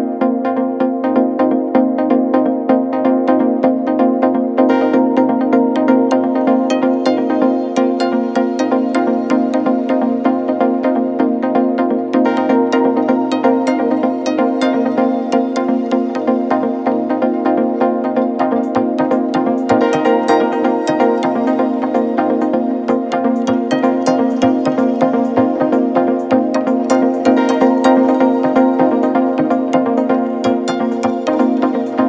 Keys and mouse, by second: 0.8 shift+click, 1.9 l, 4.7 shift+click, 5.6 l, 7.6 l, 8.3-9.4 shift+drag, 9.9 shift+click, 10.9 shift+click, 12.8 shift+click, 13.1 shift+click, 13.8 shift+click, 15.6 shift+middle click, 16.9 shift+click, 18.5 shift+click, 21.0-22.7 middle drag, 23.5 p, 28.3 click, 28.5-32.0 drag.